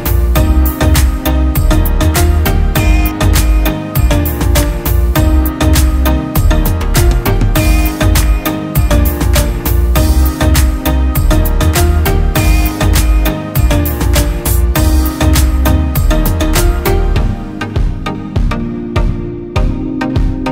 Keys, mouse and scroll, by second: 8.3 double click, 15.2-17.7 scroll up 1.